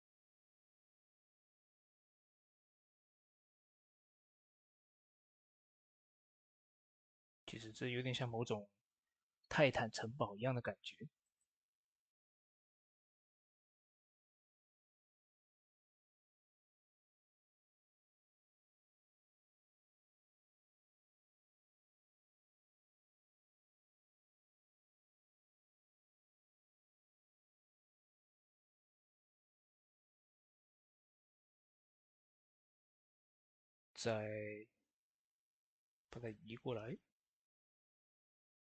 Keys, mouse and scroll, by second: 12.5 click, 12.5-17.4 drag, 17.4 ctrl+z, 19.3 click, 23.7 right click, 24.2-31.4 drag, 31.4 shift+d, 32.2-36.1 drag, 35.6-36.3 typing, 36.1-38.6 drag.